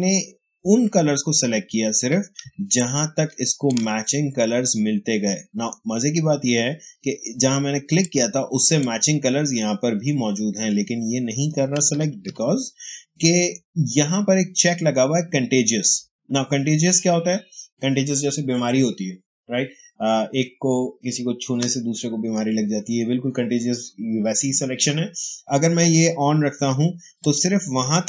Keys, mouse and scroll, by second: 2.3 space, 2.7-5.2 ctrl+drag, 5.2 space, 7.9 click, 8.2 space, 12.1 ctrl+d, 27.1 click.